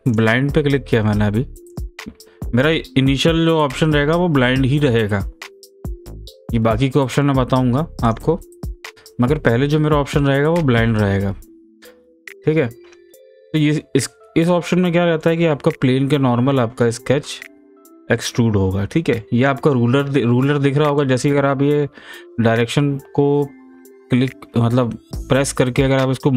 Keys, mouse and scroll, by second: 1.7 click, 6.4 click, 8.9-11.6 middle drag, 11.6 scroll up 1, 12.0-13.5 scroll down 1, 13.5-17.3 middle drag, 17.3-26.3 drag, 25.8 typing.